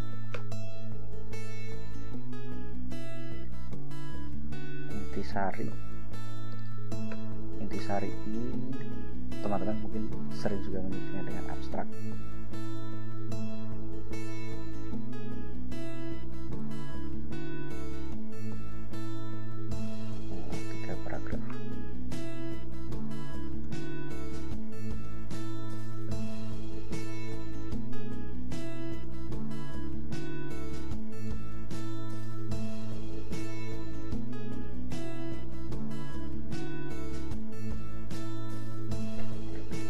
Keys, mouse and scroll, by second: 0.6 ctrl+Return, 4.0-6.3 typing, 7.3 Return, 10.5 ctrl+j, 11.7 ctrl+v, 12.9 scroll down 2, 14.3-14.9 drag, 15.0-16.1 drag, 16.6 click, 17.8 click, 18.8 Return, 19.1 ctrl+v, 19.9 Return, 20.6 ctrl+v, 21.7 Return, 23.8 ctrl+b, 24.2 ctrl+shift+k, 24.4 ctrl+shift+a, 24.6 ctrl+shift+t, 24.7 ctrl+shift+a, 25.2-26.7 typing, 29.2-37.9 typing, 32.0 ctrl+i.